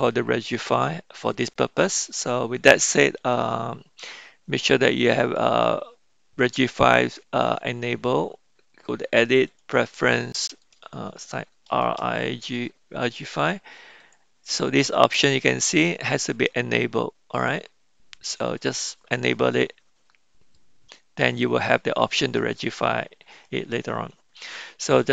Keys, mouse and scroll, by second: 5.2-9.7 drag, 23.4-24.6 middle drag.